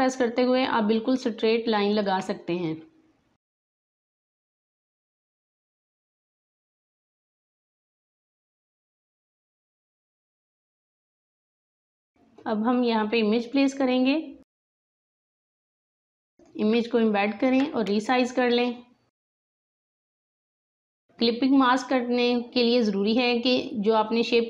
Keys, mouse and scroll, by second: 3.7-9.1 drag, 10.2 click, 10.2 space, 10.3 click, 10.4 space, 10.9 click, 11.3 space, 11.9-16.3 drag, 16.9 alt+scroll down 1, 19.1 click, 20.1 alt+scroll up 1, 20.1 space, 20.2 click, 20.3 space, 20.7 click, 23.0 click.